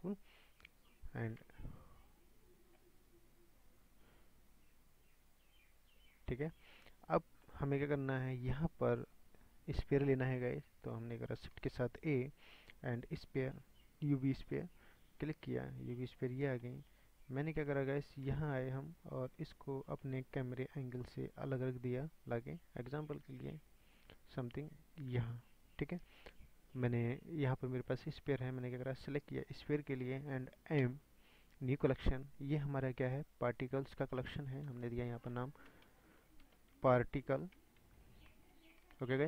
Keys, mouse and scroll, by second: 1.4 s, 3.0 scroll down 5, 3.6 scroll down 2, 4.2-6.5 drag, 6.5 scroll up 4, 7.0 scroll up 5, 7.4-8.1 middle drag, 8.1 scroll up 3, 8.9 scroll up 3, 9.1-10.2 middle drag, 10.2-10.9 scroll up 3, 10.4-10.8 shift+middle drag, 10.9-11.7 middle drag, 12.2-15.0 middle drag, 15.3 middle click, 15.6 scroll down 7, 15.8-16.3 scroll up 5, 16.3 scroll down 3, 16.6-18.2 middle drag, 18.2 KP_0, 18.4 middle click, 18.5 KP_0, 19.0 scroll down 8, 19.5 scroll up 1, 20.0-20.3 shift+middle drag, 20.3-22.6 scroll down 22, 22.6-23.1 scroll up 4, 23.3 shift+scroll up 1, 23.4-24.6 shift+middle drag, 24.6-28.2 drag.